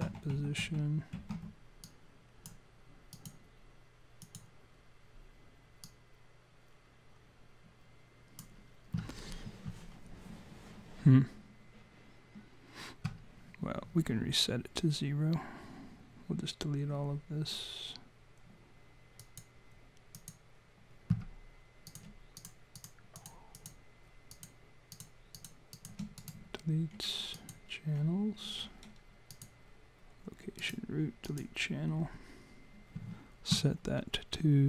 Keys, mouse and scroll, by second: 0.0 ctrl+z, 0.3 ctrl+z, 0.6 ctrl+z, 1.1 ctrl+z, 1.9 click, 3.1 click, 4.2 click, 5.8 click, 19.2 click, 20.2 click, 21.9 click, 22.4 shift+click, 22.6 shift+click, 22.8 click, 23.0 shift+click, 23.2 click, 23.5 click, 24.3 click, 24.9 shift+click, 25.4 shift+click, 25.7 shift+click, 26.2 right click, 29.3 click, 30.6 right click.